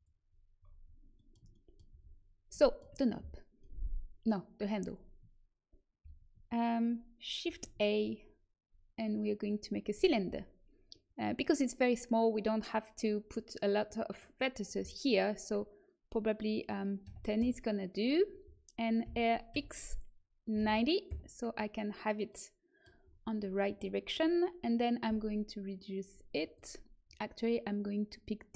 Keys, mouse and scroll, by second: 0.5-1.8 middle drag, 1.8 a, 7.4 shift+a, 14.0-15.8 drag, 19.0 r, 22.2-24.2 middle drag, 25.0 s.